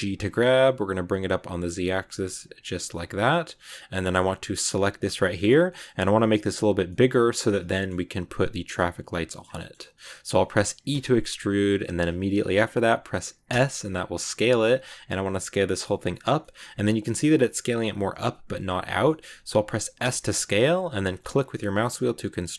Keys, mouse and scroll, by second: 3.1 scroll down 1, 3.1 middle click, 3.6-4.6 scroll up 1, 4.6 right click, 5.1 shift+middle click, 5.4 scroll up 1, 5.6-9.0 middle drag, 9.0 scroll down 2, 9.1 middle click, 9.3-9.7 scroll up 3, 9.4 middle click, 9.8 middle click, 10.8 e, 16.3-19.9 middle drag, 19.9 s.